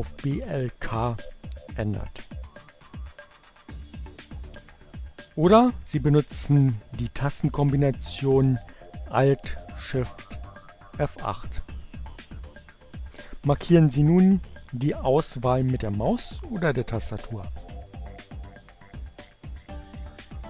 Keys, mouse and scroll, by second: 4.4 click, 9.6 alt+shift+F8, 17.7-20.4 drag.